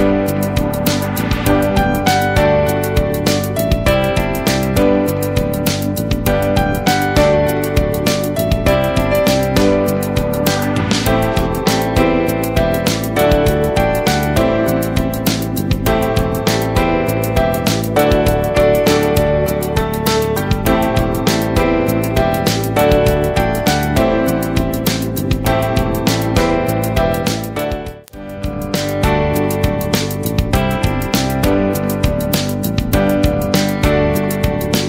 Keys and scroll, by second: 33.3 ctrl+space, 33.8 ctrl+space.